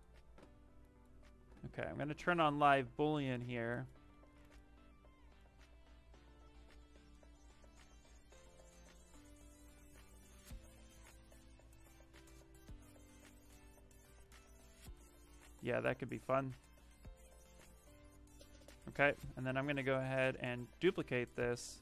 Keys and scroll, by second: 4.1 shift+f, 9.6 q, 20.2 ctrl+shift+d, 20.7 w.